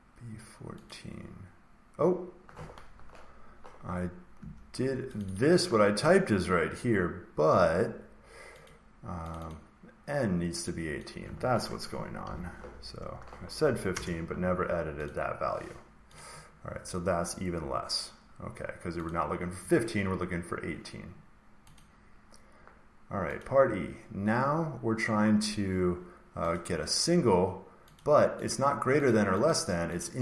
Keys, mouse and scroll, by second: 0.8 click, 4.3 Escape, 5.1 click, 5.3 click, 7.4 Escape, 8.6 click, 9.2 click, 9.4 click, 10.9 click, 12.1 8, 13.8 Return, 15.0 click, 16.1 click, 19.0 click, 21.7 click, 23.3 click, 26.5 click, 27.9 click, 28.4 click, 29.0 click, 29.4 click, 29.9 click.